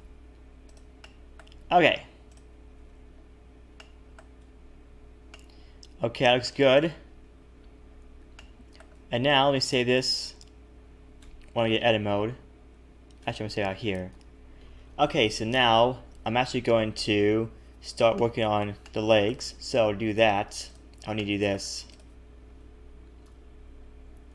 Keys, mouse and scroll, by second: 1.0 middle click, 2.3 click, 2.7 a, 2.8 a, 3.1-3.7 scroll down 5, 3.7 middle click, 4.4 Tab, 5.0 scroll down 1, 5.3 middle click, 6.4 shift+middle click, 7.0-7.7 scroll up 1, 7.7-8.0 scroll up 1, 8.3 shift+middle click, 9.1 scroll up 1, 11.2 Tab, 13.2 Tab, 14.1 ctrl+s, 16.1 Tab, 16.3-18.1 scroll down 4, 18.1 middle click, 18.1-18.6 scroll down 1, 18.8 shift+middle click, 20.7 click, 21.2 middle click, 23.0 click, 23.2 KP_3.